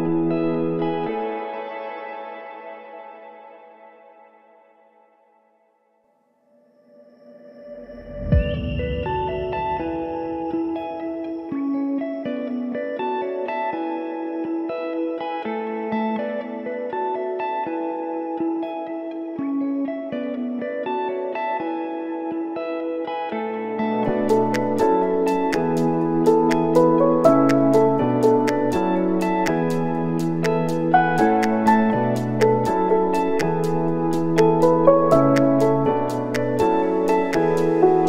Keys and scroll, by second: 11.4 space, 17.4 space, 18.9 s, 19.1 Home, 25.7 space.